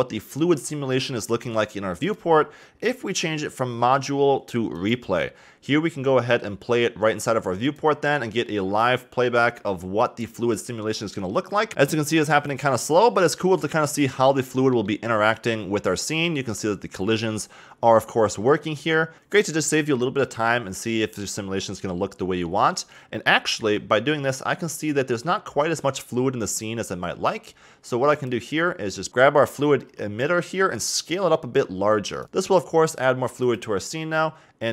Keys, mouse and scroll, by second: 2.0-6.0 drag, 7.6 click, 9.3-9.7 scroll up 1, 15.9-19.1 middle drag, 19.1-20.6 middle drag, 23.0-24.2 middle drag, 24.2 KP_1, 28.9 click, 29.9 s, 32.3 click, 33.4 click.